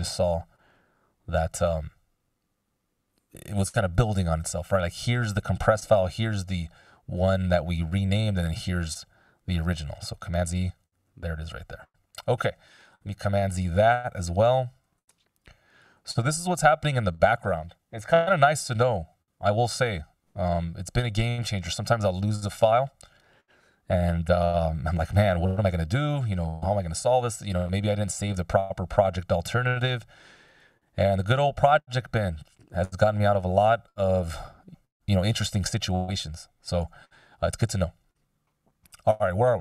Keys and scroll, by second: 9.8 super+z, 14.1 super+z, 16.0 super+z, 20.5 F16, 32.0 f, 37.0 f.